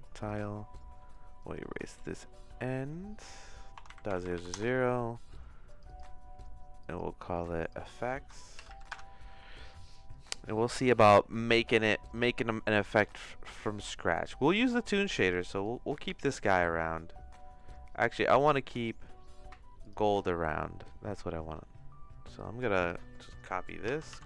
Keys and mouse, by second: 0.2 click, 0.3-4.9 drag, 4.2 KP_0, 4.3 KP_0, 5.7 click, 5.8-11.7 drag, 12.1 click, 13.0-14.0 drag, 15.7 click, 17.5 middle click, 18.4 middle click, 19.8 click, 22.3 click, 23.9 ctrl+c, 24.1 ctrl+c.